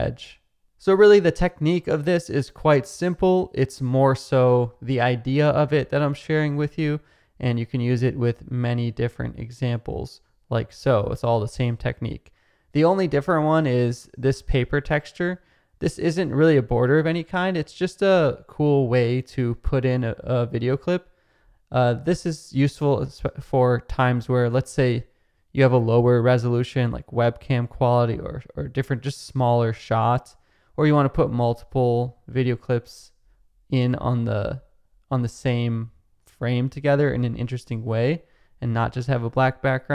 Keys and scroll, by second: 0.1 Down, 0.6 space, 5.8 space.